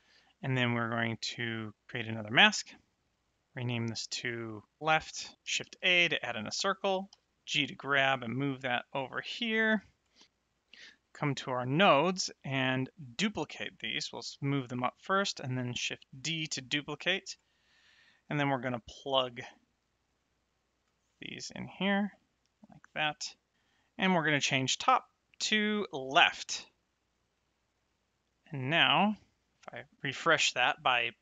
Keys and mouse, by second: 1.9 click, 2.9 click, 4.8 f, 5.6 shift+a, 6.1 click, 7.1 g, 9.7 click, 11.5 middle click, 12.5 click, 14.3 g, 15.1 click, 15.7 shift+d, 17.2 click, 17.9 middle click, 20.0 click, 21.0 middle click, 21.8 ctrl+shift+click, 23.5 middle click, 24.9 click, 27.3 middle click, 28.6 click.